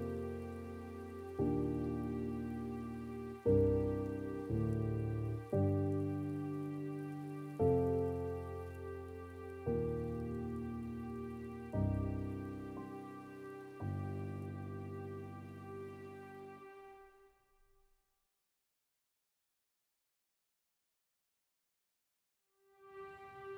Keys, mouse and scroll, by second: 4.3-4.7 scroll down 2, 4.7 scroll up 2, 6.1 scroll up 1, 13.8 middle click, 14.7-15.0 scroll down 3, 17.6-20.1 middle drag, 20.1-23.5 drag.